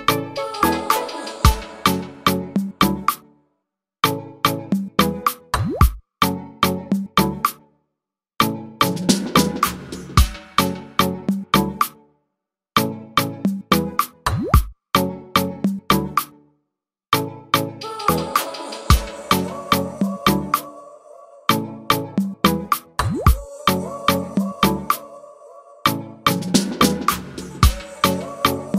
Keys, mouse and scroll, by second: 26.9 ctrl+z.